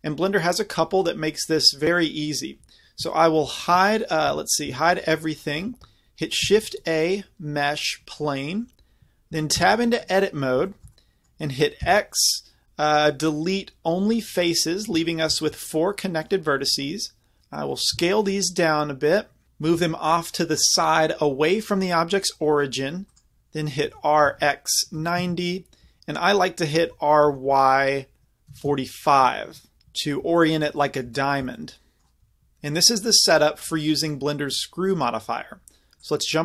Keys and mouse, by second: 3.4 shift+h, 4.3 a, 4.8 shift+h, 6.4 shift+a, 9.5 Tab, 11.8 x, 17.4 a, 17.9 s, 19.7 g, 23.2 click, 23.8 r, 26.8 r, 30.4-34.0 middle drag, 36.0-36.4 drag.